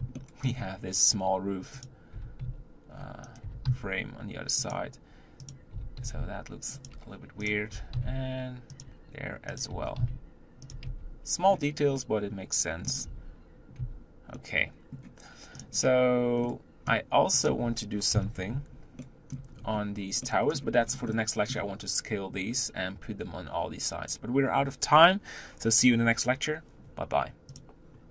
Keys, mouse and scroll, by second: 0.0 shift+middle click, 0.3-1.1 scroll up 1, 1.6 click, 1.9 g, 3.2 g, 5.3 click, 5.5 g, 7.3 click, 7.5 g, 9.4 click, 9.5 g, 10.7 Tab, 11.1-11.7 scroll down 2, 11.7-12.9 middle drag, 12.9 Tab, 13.6 Tab, 14.1-15.5 middle drag, 15.5 click, 15.7-16.2 scroll down 1, 16.2-17.3 middle drag, 17.3 click, 17.9 KP_7, 18.8-19.3 shift+middle drag, 19.3-19.6 scroll up 4, 20.0-20.6 middle drag, 20.6 scroll down 3, 20.8-28.1 middle drag.